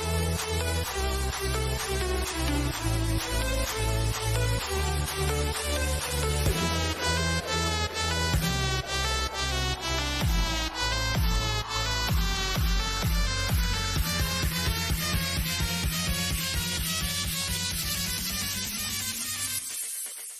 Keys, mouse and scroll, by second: 9.0 click.